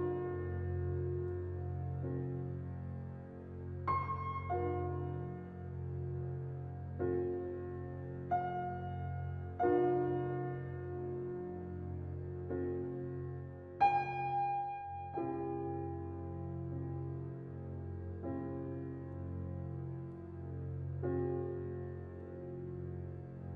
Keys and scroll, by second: 1.7 ctrl+t.